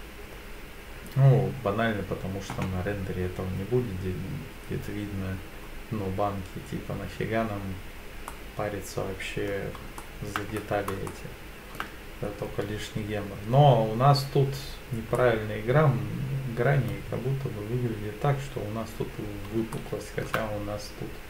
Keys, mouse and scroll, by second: 5.7-8.3 scroll down 2, 8.3-9.5 middle drag, 8.3 scroll down 1, 10.0 shift+middle click, 10.5-10.9 scroll up 2, 11.1-11.8 shift+middle drag, 15.2-16.9 middle drag, 19.8-20.3 shift+middle drag.